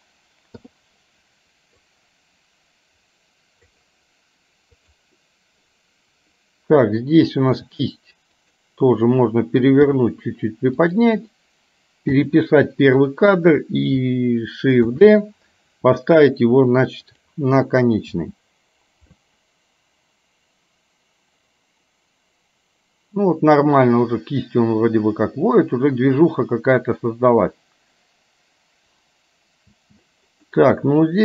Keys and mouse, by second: 0.6 i, 2.0-3.9 drag, 4.9 click, 7.6 r, 9.9 g, 12.2 i, 13.1 click, 15.0 shift+d, 18.2 space, 29.9 space, 30.5 middle click.